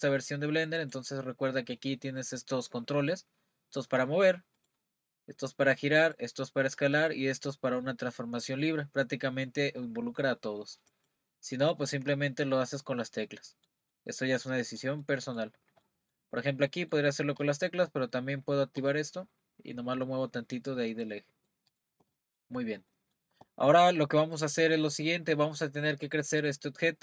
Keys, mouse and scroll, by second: 0.8-3.8 drag, 4.6-10.0 drag, 10.9 click, 12.6-13.3 scroll up 2, 13.3-16.3 middle drag, 16.3-16.7 scroll up 2, 16.7-17.4 middle drag, 17.4 click, 18.8-20.2 drag, 21.7 click, 22.2-22.6 middle drag, 22.6-22.9 scroll down 1, 22.9-26.0 middle drag, 26.9-27.0 scroll down 1.